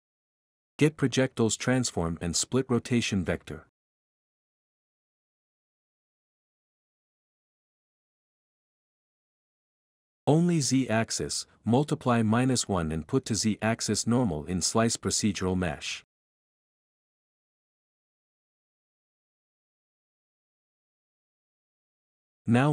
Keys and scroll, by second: 0.9-2.8 typing, 14.8-16.4 typing, 18.2 Right, 18.4 Right, 18.5 Right, 18.8-19.9 typing, 21.4-22.7 typing.